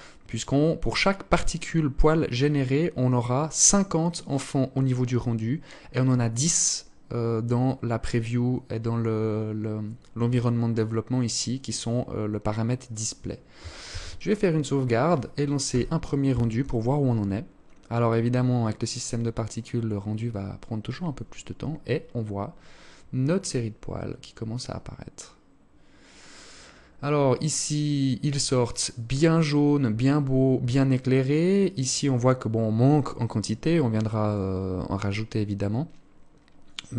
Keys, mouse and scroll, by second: 13.0 ctrl+s.